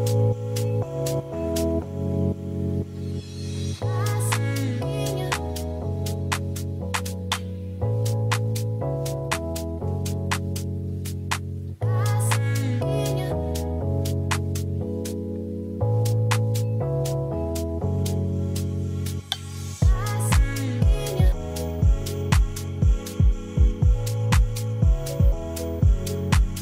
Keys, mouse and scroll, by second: 0.1 click, 0.7 shift+middle drag, 1.3 click, 2.1 click, 3.5 click, 4.1-4.6 drag, 5.1 middle click, 6.7 shift+middle drag, 8.8 ctrl+s, 9.2 shift+middle drag, 9.7 click, 9.9 shift+middle click, 10.1 scroll up 1, 10.7 click, 11.7 click, 12.3 ctrl+s, 13.7 click, 15.0 click, 15.7 KP_0, 16.6 KP_0, 17.2 shift+middle click, 18.7 click, 20.0 drag, 21.0 middle click, 21.5 click, 23.0 click, 23.8 ctrl+s, 25.1 click.